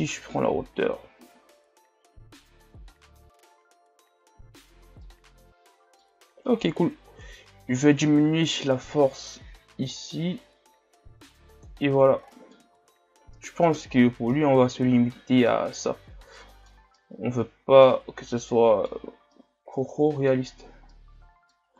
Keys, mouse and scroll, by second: 5.0-7.3 middle drag, 7.3-10.4 drag, 12.0-12.3 scroll down 1, 12.3 middle click, 12.8 a, 13.1 scroll down 1, 13.4 middle click, 13.8-14.3 scroll up 2, 14.3-20.6 middle drag, 20.6-20.9 scroll down 2, 20.9-21.7 middle drag.